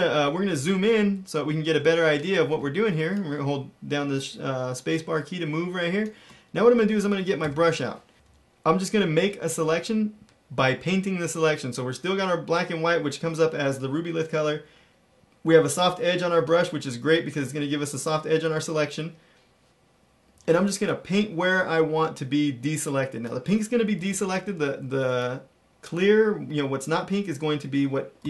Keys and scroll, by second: 0.6 super+=, 1.0 super+=, 1.4 super+=, 2.5-4.9 space, 5.4 space, 7.4-9.1 typing, 20.2 ], 20.3 ], 23.9-24.6 typing, 28.1-28.2 typing.